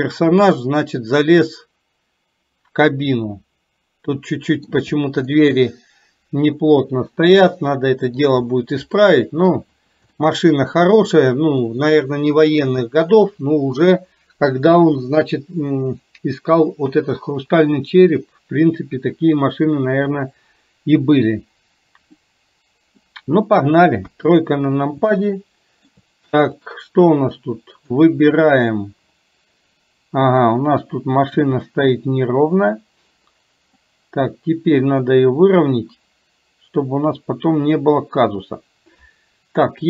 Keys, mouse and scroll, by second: 5.4-8.4 middle drag, 9.0 middle click, 10.2-10.7 shift+middle drag, 11.0-11.7 middle drag, 12.9-13.9 middle drag, 22.1-23.1 middle drag, 24.1 KP_3, 25.2-26.0 shift+middle drag, 26.7-28.1 drag, 31.5 r, 34.2-38.4 drag.